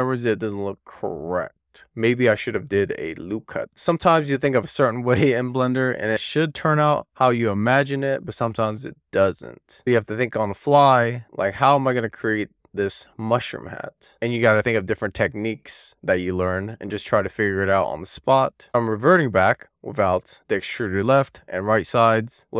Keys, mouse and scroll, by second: 0.5 click, 3.8 super+z, 4.4-6.4 middle drag, 6.6 alt+middle click, 13.1-14.2 scroll down 2, 14.2-15.3 middle drag, 15.7 shift+middle click, 17.0 alt+middle click, 17.4 alt+middle click, 18.3 middle click, 18.6 super+z, 19.2 super+z, 19.4 super+z, 22.3 alt+middle click, 22.4 click.